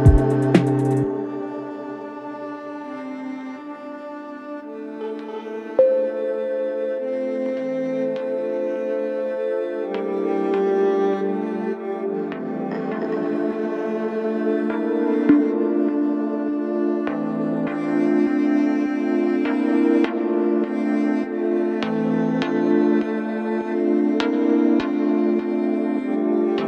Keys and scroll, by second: 1.3 ctrl+z, 4.6 ctrl+z, 5.3 ], 6.9 3, 7.1 4, 7.7 1, 8.8 ctrl+z, 10.9 4, 22.4 0, 22.5 Return, 22.7 9, 22.9 Return, 23.1 0, 23.3 Return, 24.5 9, 24.6 Return, 26.1 F1, 26.2 F2.